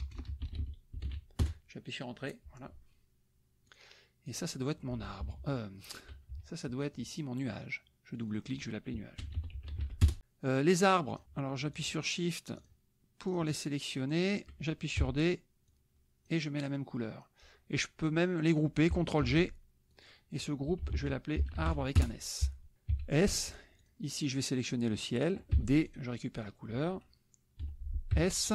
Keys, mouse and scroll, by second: 0.0-1.5 typing, 3.7 click, 4.2 click, 5.2 KP_Subtract, 6.4 KP_Subtract, 8.2 click, 9.0-10.2 typing, 11.1 click, 11.8 shift+click, 12.6 shift+click, 13.3 shift+click, 14.1 shift+click, 15.0 d, 15.7 click, 19.2 ctrl+g, 19.9 click, 20.6-21.6 typing, 22.0 Return, 22.9 s, 23.8 click, 25.5 d, 25.8 click, 26.5 click, 27.6 F1, 28.1 s.